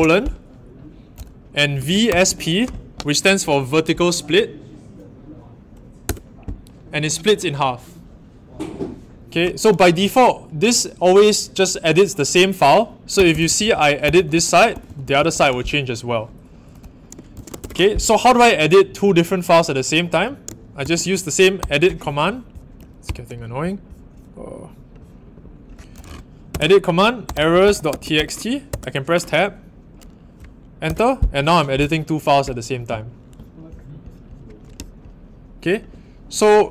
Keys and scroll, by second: 1.5-2.7 typing, 6.0 Return, 12.9-15.8 typing, 17.1-17.9 typing, 20.8 shift+;, 21.5 e, 23.0 ctrl+alt+Right, 27.0-28.6 typing, 30.8 Return.